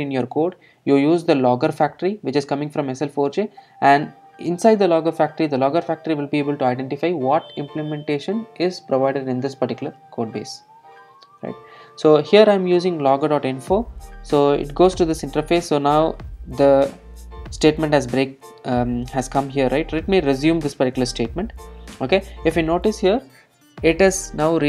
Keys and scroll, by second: 21.2 alt+super+r.